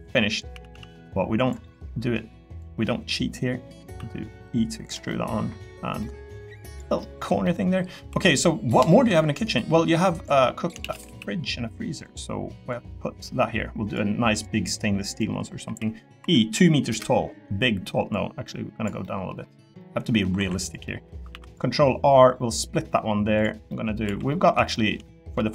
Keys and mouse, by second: 0.5 s, 0.7 z, 1.6 middle click, 2.6 click, 3.9 e, 4.8 click, 5.1 middle click, 6.0 middle click, 7.0 middle click, 7.4 middle click, 8.1 3, 8.4 middle click, 10.1 click, 10.8 shift+d, 11.0 s, 12.0 click, 12.7 click, 15.6 e, 16.2 2, 16.9 Return, 19.0 middle click, 19.8 click, 20.4 2, 20.8 click, 21.3 ctrl+r, 23.7 click, 24.0 3, 24.3 click, 24.7 shift+middle click, 25.0 middle click.